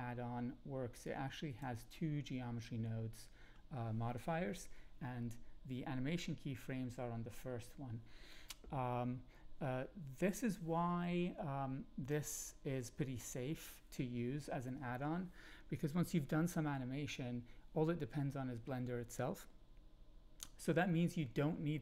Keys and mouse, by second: 1.0 click.